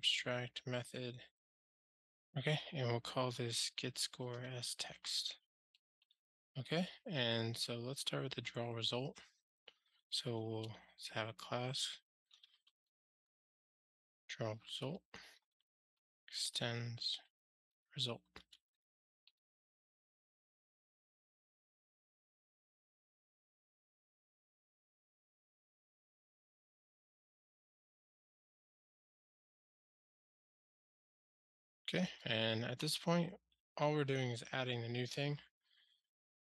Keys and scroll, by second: 0.0 Tab, 6.3 super+s, 16.0 Return, 21.5 alt+Return, 26.1 alt+Return, 30.6 super+s, 32.2 ctrl+alt+shift+r.